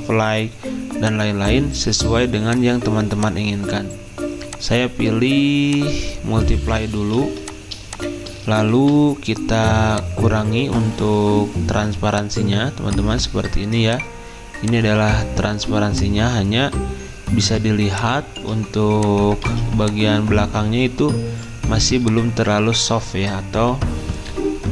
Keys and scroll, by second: 21.9 v.